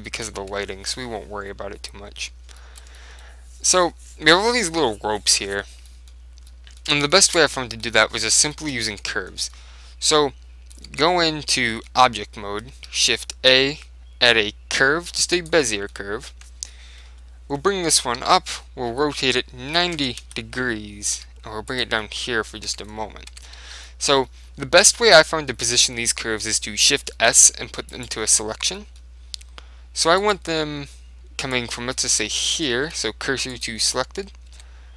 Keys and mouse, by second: 0.6 Tab, 1.8 middle click, 2.7-4.9 middle drag, 6.0-11.4 middle drag, 8.3 Tab, 9.0 Tab, 11.0 Tab, 11.8-13.7 middle drag, 12.8 shift+a, 15.7-17.2 middle drag, 17.2 KP_7, 17.2 middle click, 18.3 z, 19.0 r, 21.2 g, 21.9 click, 22.1 middle click, 22.8 Tab, 23.4 Tab, 23.4 middle click, 23.7 click, 23.7 z, 28.0 right click, 28.2 click, 28.2 middle click, 28.4 Tab, 28.8 right click, 29.6 middle click, 30.3 click, 31.5-33.4 right drag, 32.5 shift+s, 33.5 middle click, 34.0 middle click, 34.6 Tab.